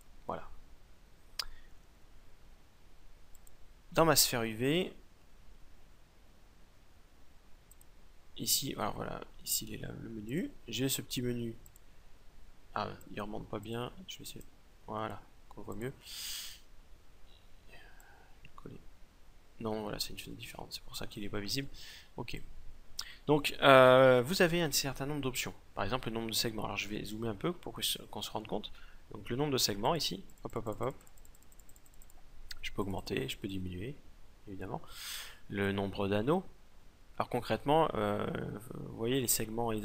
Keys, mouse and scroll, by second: 2.9-4.7 drag, 4.7-7.3 middle drag, 7.3-9.0 drag, 9.0 middle click, 9.8-19.5 drag, 21.9-23.9 drag, 26.2-29.4 middle drag, 29.4-34.8 drag, 34.8 middle click, 35.2-37.1 drag.